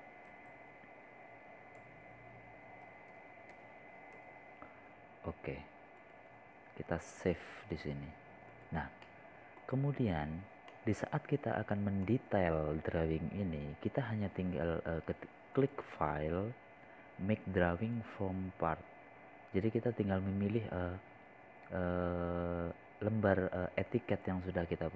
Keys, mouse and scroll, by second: 2.2-4.8 typing, 6.1-7.2 typing, 9.1 click, 12.0 middle click, 12.6 scroll up 1, 13.0 scroll down 1, 13.8-15.9 middle drag, 18.6 click.